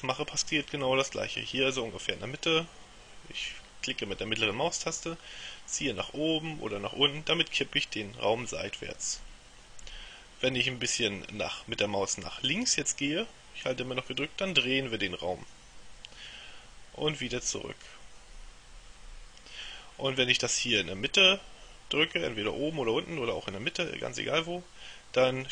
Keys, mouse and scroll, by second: 3.6-20.2 middle drag, 24.5-25.5 middle drag.